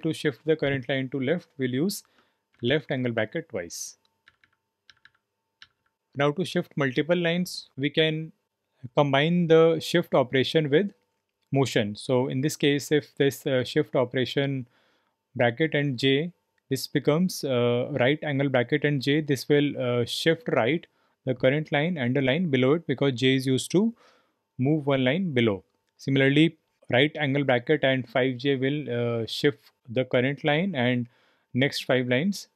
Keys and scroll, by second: 2.5 shift+,, 2.6 shift+,, 4.2 shift+,.